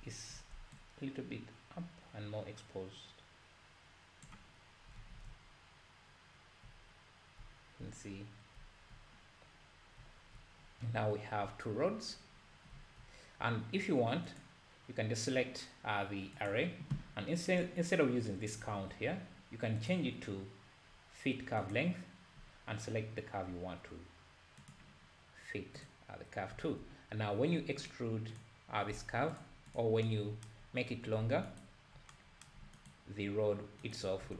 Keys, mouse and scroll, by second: 1.4-3.8 shift+drag, 5.0 alt+a, 5.3 `, 8.1-8.6 scroll up 1, 9.7-10.1 scroll down 2, 11.9-12.7 scroll down 1, 12.7 `, 14.4 click, 21.8-24.9 drag, 26.5 `, 28.4 click, 28.9 Tab, 29.3 click, 29.7 click, 31.6 ctrl+right click, 32.8 ctrl+right drag, 34.0 ctrl+right click, 34.3 Tab.